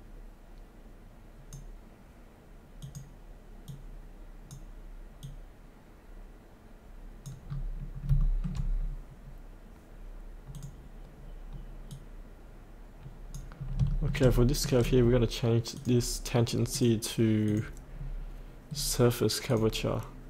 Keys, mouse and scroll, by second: 7.4-8.0 scroll up 1, 8.2 shift+middle click, 10.5-13.5 drag, 13.6 scroll up 1, 13.9 shift+middle click, 14.9-15.7 scroll down 1, 15.7 click, 17.9-19.5 scroll down 1, 19.5 click.